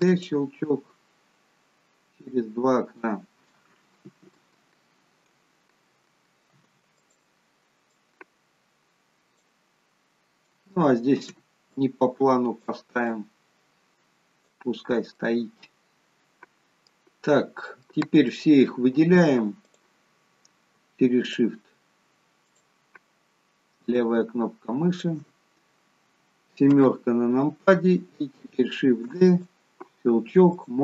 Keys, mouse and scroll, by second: 0.8 click, 6.4 shift+d, 7.9 click, 11.2 shift+d, 13.1 click, 15.2 middle click, 17.3-17.9 scroll down 1, 17.9 middle click, 19.6 click, 21.2 shift+click, 22.5 click, 23.9 shift+click, 26.8 KP_7, 28.8 shift+d, 30.5 click.